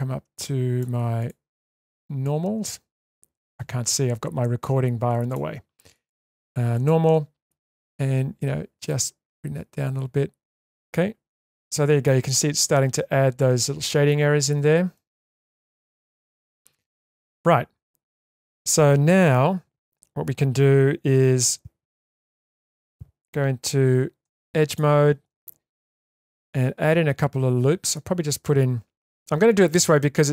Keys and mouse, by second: 1.7 click, 2.2-3.4 drag, 5.9-7.1 drag, 8.9 click, 9.0-10.4 drag, 10.4 Tab, 10.4 middle click, 11.6-12.1 middle drag, 14.9-15.2 shift+middle drag, 16.1-17.2 shift+middle drag, 22.1 ctrl+3, 24.2 2, 24.7 click, 26.1 ctrl+r.